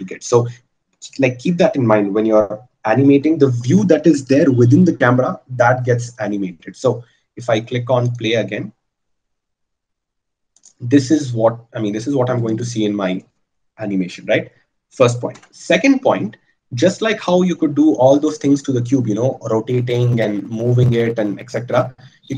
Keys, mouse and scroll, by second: 15.5 KP_0.